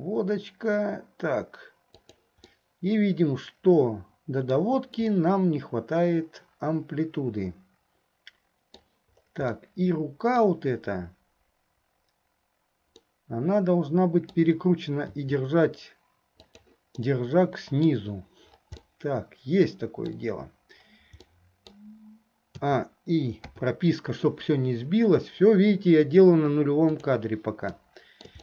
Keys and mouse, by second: 2.7-4.7 middle drag, 5.3-9.0 middle drag, 9.6-10.6 middle drag, 13.1-14.6 middle drag, 17.2 click, 17.2 middle click, 17.2 right click, 19.0-20.3 drag, 19.0-20.3 middle drag, 19.0-20.3 right drag, 21.4 click, 21.4 middle click, 21.4 right click, 22.8 a, 23.6 i, 27.1 click, 27.9 shift+click, 27.9 shift+right click, 28.2 shift+middle click.